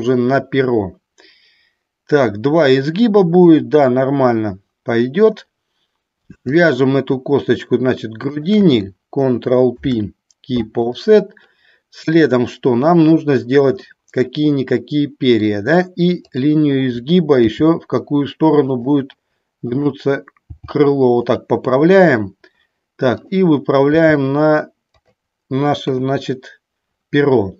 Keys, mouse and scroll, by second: 8.4 shift+click, 9.9 ctrl+p, 14.1-15.7 middle drag, 16.3 click, 17.7 g, 18.9 click, 21.3 click, 21.3 g, 23.4 click, 25.2 click, 26.2 KP_1.